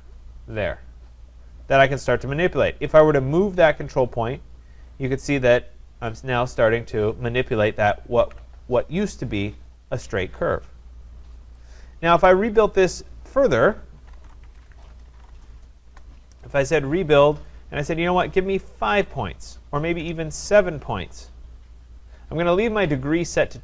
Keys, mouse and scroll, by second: 4.5 click, 8.2 ctrl+z, 11.7 click, 12.6 click, 13.9-15.1 typing, 15.9 Return, 17.8 click, 18.9 5, 20.0 BackSpace, 20.4 7.